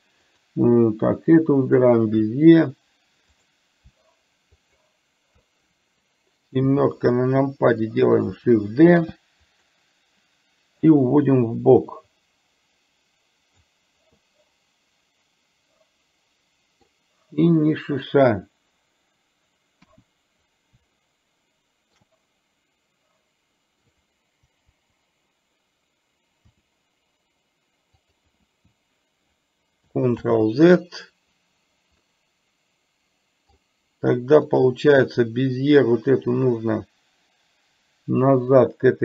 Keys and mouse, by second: 0.4 click, 1.9 shift+click, 3.4-3.7 drag, 4.6 shift+click, 9.0 shift+d, 11.1-13.6 drag, 14.2-17.0 middle drag, 21.1-22.1 middle drag, 26.6 r, 30.4 ctrl+z, 32.2-33.6 middle drag, 34.6 click, 36.0-39.0 drag.